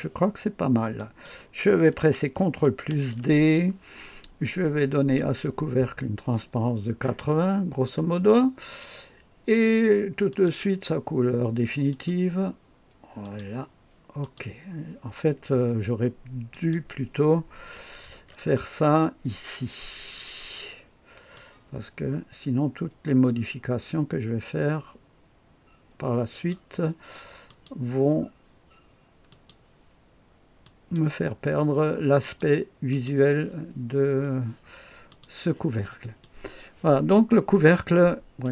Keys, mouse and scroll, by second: 0.9 click, 2.8 ctrl+d, 5.1-7.8 drag, 10.2 click, 11.8 click, 13.1 click, 14.1 click, 16.4 click, 18.1 ctrl+d, 21.3-26.5 drag, 27.4 click, 29.2 click, 30.6 click, 32.1 click, 32.8 click, 35.0 click, 36.1-37.6 drag, 38.3 click.